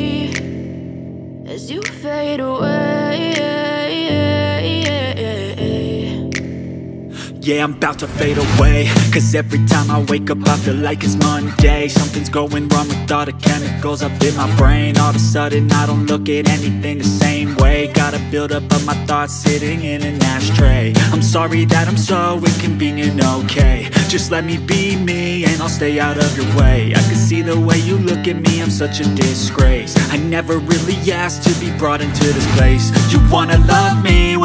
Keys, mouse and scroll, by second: 1.7 right click, 12.5-16.0 typing, 27.0 double click.